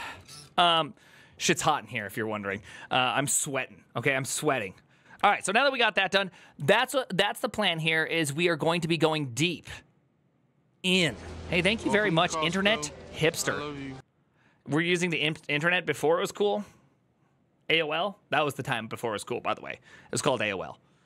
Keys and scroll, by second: 6.6 alt+".